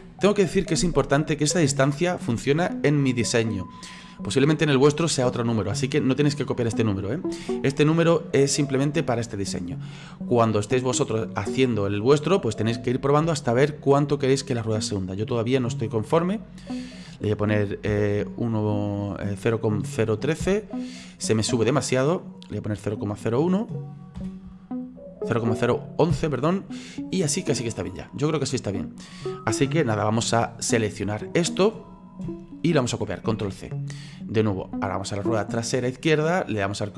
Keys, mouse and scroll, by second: 15.6-27.5 drag, 27.5-27.8 scroll down 2, 27.8-30.0 middle drag, 30.0-34.8 drag, 34.8 right click.